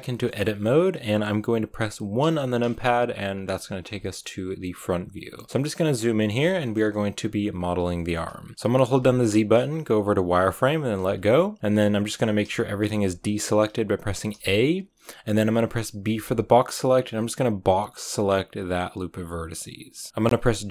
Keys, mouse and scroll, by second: 2.1 KP_1, 3.9-5.7 shift+middle drag, 5.7-6.5 scroll up 5, 6.5 shift+middle click, 6.7 scroll up 1, 7.9 shift+middle click, 8.1-10.9 scroll up 1, 10.9 z, 11.3-12.3 shift+middle drag, 12.3 a, 12.7 a, 14.2 a, 20.1-20.7 scroll up 1.